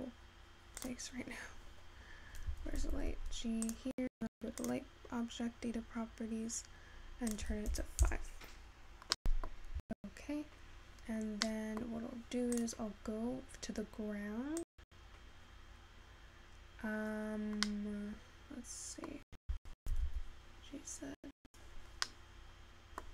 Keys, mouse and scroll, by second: 2.4-3.4 scroll down 1, 3.4 g, 7.4-20.9 drag, 20.9 g, 22.3-23.1 middle drag.